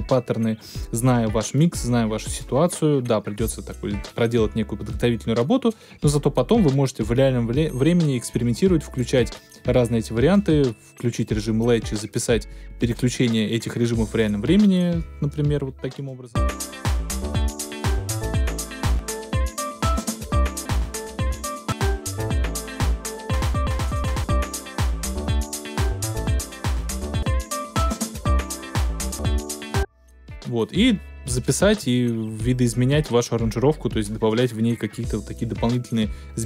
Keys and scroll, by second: 16.3 space, 29.6 space.